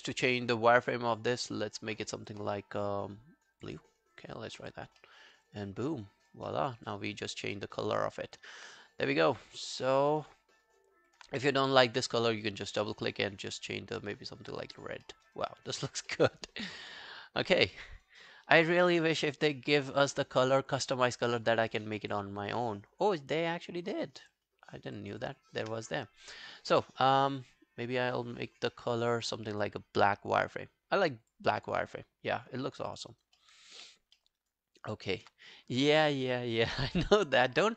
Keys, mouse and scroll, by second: 4.7 double click, 5.1 alt+middle click, 5.3 alt+right click, 5.5 alt+click, 6.5 alt+middle click, 6.7 alt+right click, 6.9 alt+click, 7.6 alt+middle click, 7.8 alt+right click, 8.0 alt+click, 9.9 alt+middle click, 10.1 alt+right click, 10.3 alt+click, 12.1 double click, 14.7 double click, 15.1 alt+middle click, 15.3 alt+right click, 15.5 alt+click, 16.1 alt+middle click, 16.5-16.9 alt+scroll down 1, 16.9 alt+right click, 17.2 alt+click, 17.9 alt+right click, 18.2 alt+click, 25.2 double click, 29.6 double click, 32.0 double click, 32.0 scroll down 2, 32.6 alt+scroll down 1, 32.9 alt+click, 33.1 alt+right click, 33.4 alt+middle click, 33.6 alt+right click, 33.8 alt+click, 34.2 alt+middle click, 34.4 alt+right click, 34.7 alt+click, 37.6 alt+middle click.